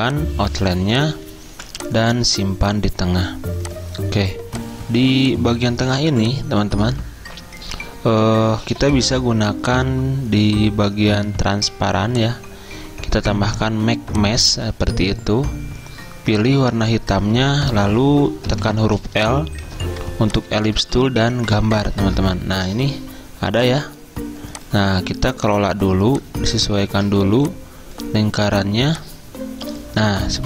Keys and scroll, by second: 1.6 v, 4.3 z, 5.9-6.6 typing, 18.6 i.